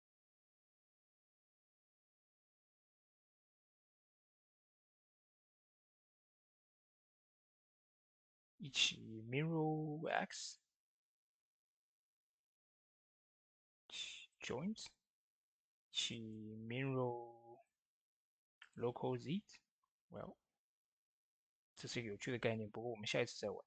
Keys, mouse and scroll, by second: 2.5 right click, 3.1 click, 6.6 shift+d, 7.9 right click, 9.9 click, 11.6 ctrl+z, 13.0-13.7 typing, 13.2 right click, 14.0 click, 16.0 right click, 17.8-18.6 typing, 18.5 click, 22.1 ctrl+z.